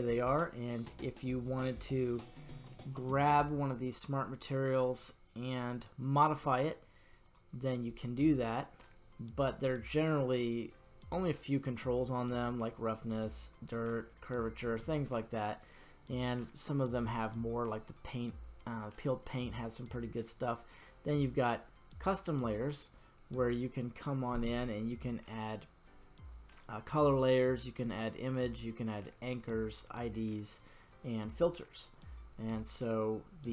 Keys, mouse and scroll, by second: 8.4 click, 9.4-10.5 scroll down 2, 10.5-12.5 drag, 12.9-14.5 drag, 22.3 click.